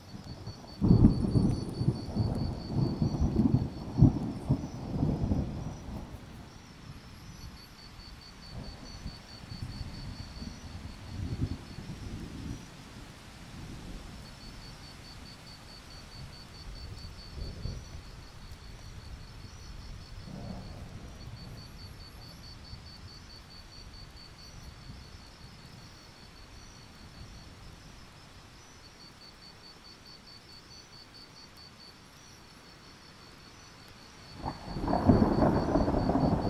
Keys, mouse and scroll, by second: 3.3-4.6 scroll down 1, 4.6 click, 10.8 ctrl+z, 12.3-17.0 drag, 17.5-17.9 alt+scroll up 1, 17.9 click, 18.7-19.7 alt+scroll down 1, 19.7 click, 23.6-24.0 alt+scroll up 1, 25.7-30.5 drag, 31.0 alt+click, 31.5 click, 32.0 ctrl+z, 32.4-34.9 alt+drag, 35.4 alt+scroll down 1, 35.9-36.4 drag.